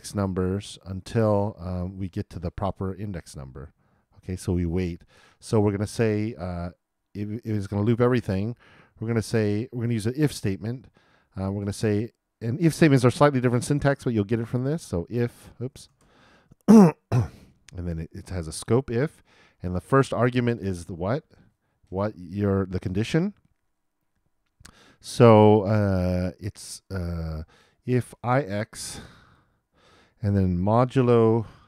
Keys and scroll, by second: 15.2 shift+\, 15.6 shift+BackSpace, 17.6-18.8 typing, 31.5 shift+5.